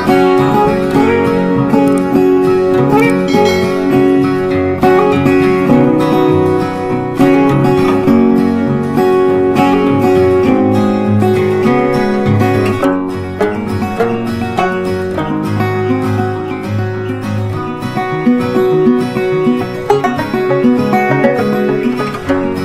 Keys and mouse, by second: 3.4-6.6 drag, 7.7 c, 8.3-13.0 drag, 13.0-16.1 drag, 17.0 c, 17.7-22.6 drag.